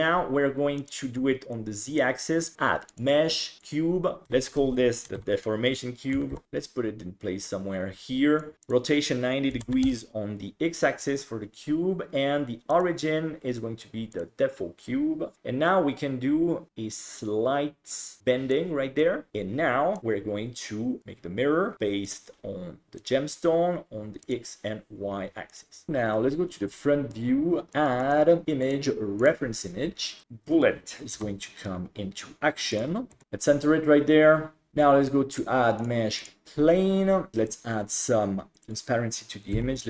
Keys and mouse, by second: 0.8 click, 1.5-2.0 middle drag, 2.9 click, 4.2 F2, 6.4-8.4 drag, 8.6-9.8 drag, 11.0 right click, 12.8-14.2 drag, 15.3-18.5 drag, 19.0 middle drag, 19.3 KP_7, 20.0-21.0 drag, 22.0 click, 25.5-25.9 middle drag, 25.9 KP_1, 28.1-29.4 drag, 31.2 r, 33.1 s, 34.7 ctrl+s, 35.4-36.3 drag, 38.7-39.8 drag.